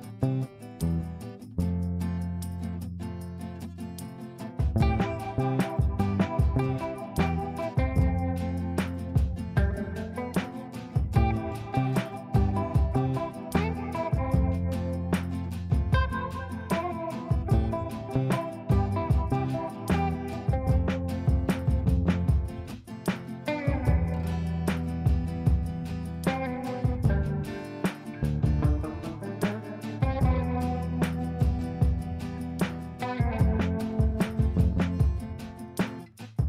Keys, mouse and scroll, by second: 3.2 space, 4.1 click, 12.5-16.0 typing, 14.4 shift+Return, 16.6 ctrl+space, 17.1-18.0 drag, 19.5 F2, 20.0-20.7 drag, 29.6 space, 30.3 click, 30.4 click.